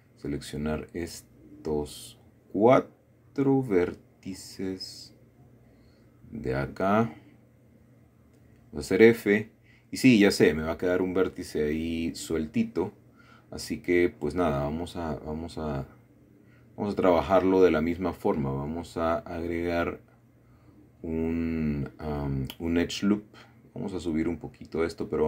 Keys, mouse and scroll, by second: 1.5 middle click, 2.1-2.7 scroll up 1, 2.7 middle click, 4.5 middle click, 6.8 click, 8.0 click, 8.6 middle click, 9.6 shift+middle click, 10.3 shift+middle click, 10.7-11.8 scroll down 1, 11.8 f, 12.7-13.1 scroll down 1, 13.1-14.4 middle drag, 14.7 middle click, 17.2 shift+middle click, 17.8 shift+middle click, 18.9 click, 19.6-20.4 scroll up 1, 22.1 middle click, 23.0 click.